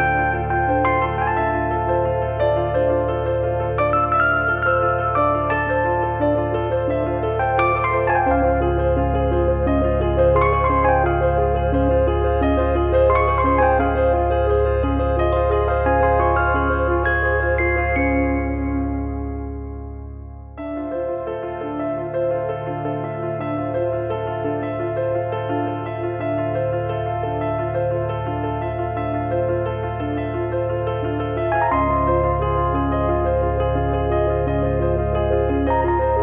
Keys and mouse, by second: 0.5 click, 1.3 click, 1.9 click, 2.4 middle click, 2.8 shift+middle click, 3.6 click, 4.5 e, 5.2 click, 5.6 f, 5.8 middle click, 6.1 middle click, 9.3 middle click, 11.0 e, 12.3 click, 12.7 f, 12.9 middle click, 14.6 click, 15.4 click, 16.2 click, 16.7 middle click, 17.7 click, 18.2 middle click, 19.8 click, 20.1 e, 20.7 click, 21.1 middle click, 22.5 click, 22.7 click, 24.2 middle click, 24.7 click, 26.4 middle click, 26.6 shift+r, 26.9 click, 28.1 click, 28.6 middle click, 29.2 click, 30.3 click, 31.7 click, 32.2 middle click, 33.1 click, 36.0 click.